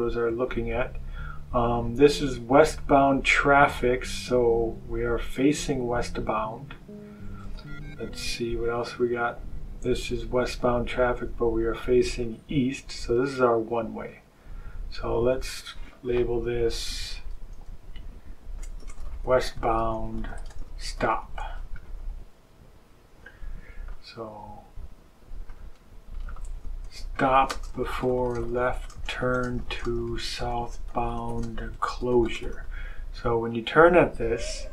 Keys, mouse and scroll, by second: 5.2 click, 6.6 click, 8.5 click, 12.1 click, 13.9 click, 15.4 click, 16.7 BackSpace, 18.5-21.6 typing, 23.8 click, 25.4 click, 26.5-32.9 typing.